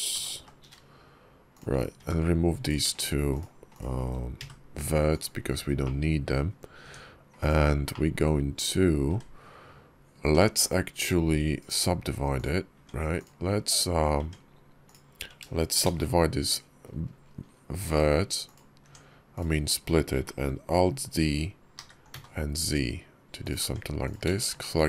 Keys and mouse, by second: 0.0 g, 1.8 Tab, 2.5 click, 2.8 shift+click, 3.2 shift+click, 4.2 x, 5.7 click, 6.7 Tab, 7.2 click, 7.8 click, 9.0 Tab, 10.1 Tab, 10.5 click, 11.5 click, 12.6 Tab, 14.0 Tab, 14.7 click, 18.7 Tab, 19.2 click, 21.6 alt+d, 23.5 Tab, 23.9 click, 24.2 shift+click.